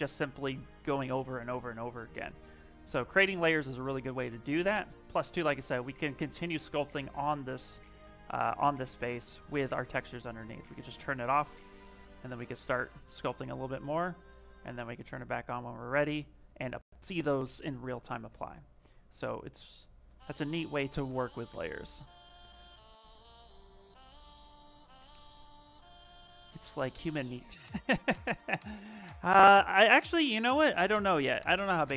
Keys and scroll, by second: 5.5 s, 8.6 shift+f, 12.1-12.9 typing, 19.4 ctrl+z, 19.8 ctrl+z, 20.2 ctrl+z, 20.8 ctrl+z.